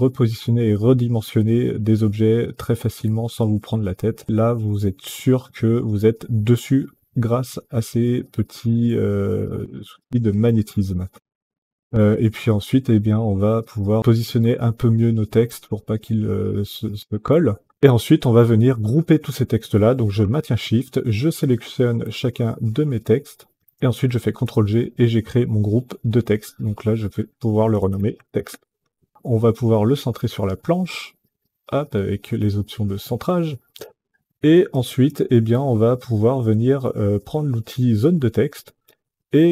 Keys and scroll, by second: 11.5 Down, 14.7 Up, 15.5 Up, 16.2 Up, 24.2 ctrl+g, 27.5-28.9 typing.